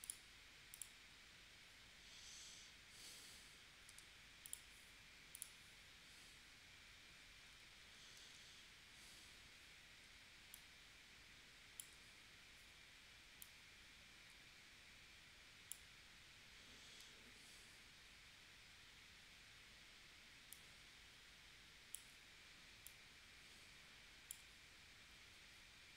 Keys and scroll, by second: 3.9 a, 8.2 shift+w.